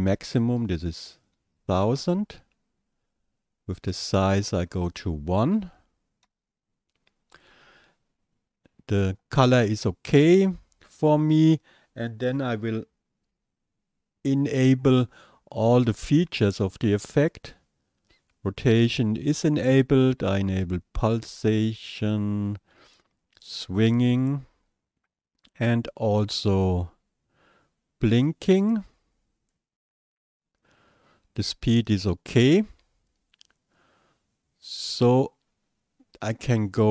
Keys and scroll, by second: 0.1 KP_1, 0.4 KP_0, 0.6 KP_0, 0.8 KP_0, 2.0 Return, 5.6 KP_1, 6.2 Return.